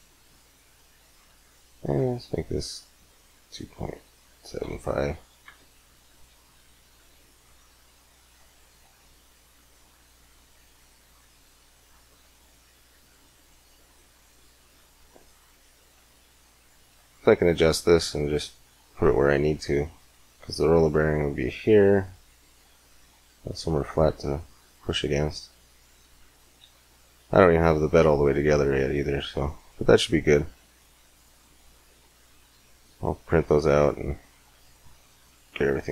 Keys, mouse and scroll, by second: 29.6 middle click.